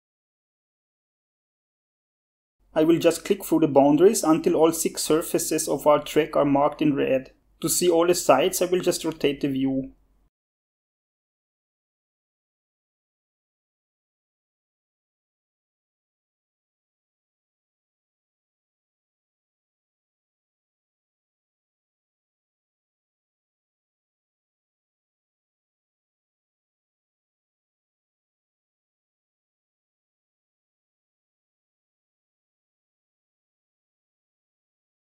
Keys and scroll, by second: 0.3 1.